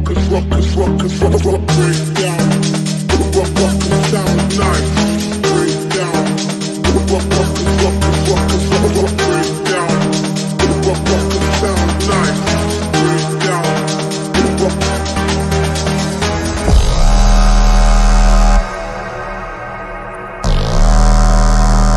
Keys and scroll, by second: 0.8 shift+F2, 1.5 F3, 3.2 shift+F2, 3.5 F3, 3.9 Escape, 5.0 F3, 5.3 Escape, 7.6 ctrl+z, 9.4 F3, 9.9 Escape, 10.2 ctrl+g.